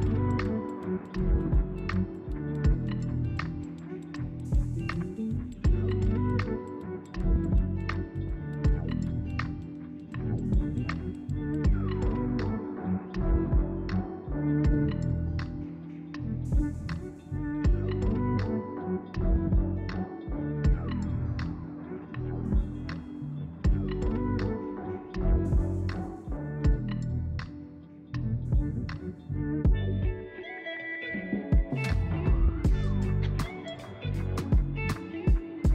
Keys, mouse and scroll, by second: 1.0 Tab, 1.6 g, 2.2 z, 2.2 z, 2.4 Tab, 2.6-3.4 middle drag, 3.4 click, 3.6 scroll down 1, 3.8 middle click, 4.0 scroll up 2, 4.4 click, 4.9 s, 5.7 click, 5.9 scroll down 2, 6.1-7.6 middle drag, 7.6-8.8 scroll up 2, 8.8 click, 9.4 click, 9.8 Tab, 12.4 click, 13.1 KP_1, 14.3 click, 15.2 g, 18.1 z, 18.1 z, 18.4 Tab, 18.7 click, 19.3 g, 20.4 z, 20.4 z, 20.5 z, 22.3-23.8 drag, 23.8 g, 25.0 click, 25.2 scroll down 1, 25.4-27.5 middle drag, 27.5-28.2 scroll up 1, 28.6 click, 29.1-30.3 middle drag, 30.3-31.2 scroll up 1, 31.2 KP_1.